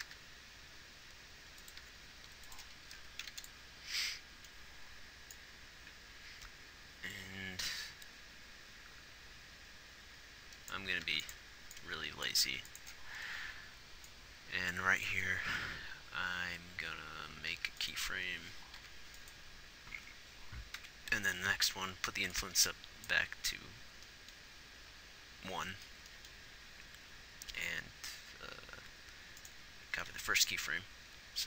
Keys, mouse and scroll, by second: 0.5 g, 2.2 r, 3.6 ctrl+s, 11.4 ctrl+s, 12.1 ctrl+s, 14.5 ctrl+s, 18.0 g, 21.2 Right, 30.3 shift+d.